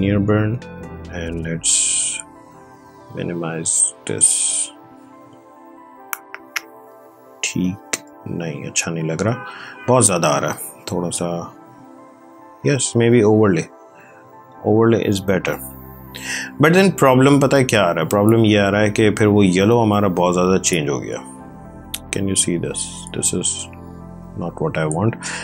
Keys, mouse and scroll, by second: 0.5 click, 7.3 space, 7.5 click, 7.8 space, 9.5 click, 12.4 click, 13.1 ctrl+space, 13.5 ctrl+click, 13.7 ctrl+space, 20.4 click.